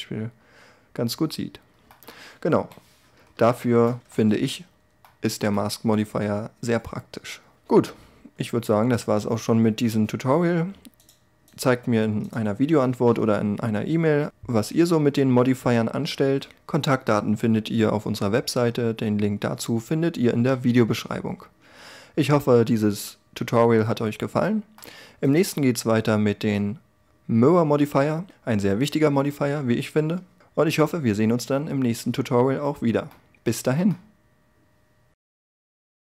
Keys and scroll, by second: 2.1 1.